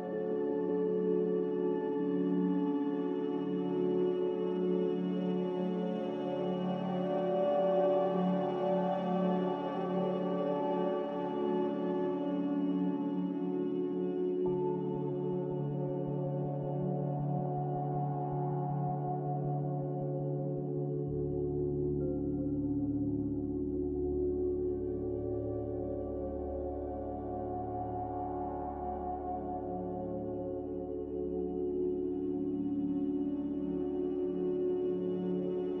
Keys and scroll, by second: 31.9 1.